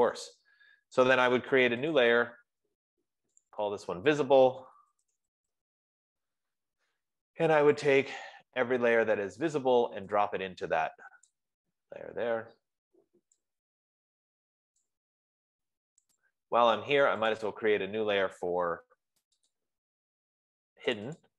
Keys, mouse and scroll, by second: 0.5 click, 2.4 click, 3.9 click, 4.1 click, 5.1-6.6 typing, 8.0 typing, 8.3 click, 11.6 click, 15.0 click, 16.7 click, 17.7 click.